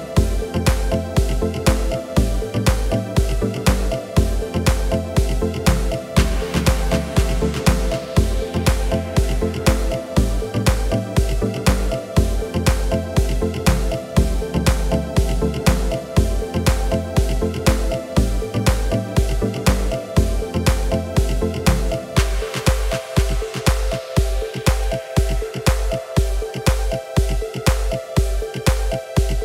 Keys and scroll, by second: 0.9 KP_7, 7.4 s, 14.0 s, 15.0 x, 19.2 g, 19.9 x, 21.7 g, 22.4 x.